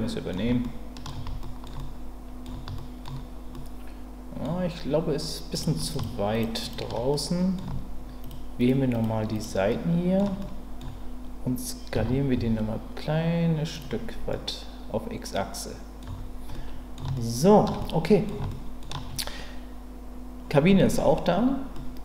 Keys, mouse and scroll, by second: 0.6 shift+middle click, 1.4 ctrl+middle click, 1.8-3.0 middle drag, 3.5 middle click, 5.5 click, 6.0 shift+click, 6.7 shift+click, 7.1 middle click, 9.0 shift+click, 9.3 shift+click, 9.7 shift+middle click, 10.4 middle click, 11.9 s, 12.3 x, 13.7 click, 14.3-16.0 middle drag, 16.0 Tab, 16.5-16.9 middle drag, 17.1-17.6 shift+middle drag, 17.8-18.2 middle drag, 18.5-18.8 shift+middle drag, 21.7-22.0 middle drag.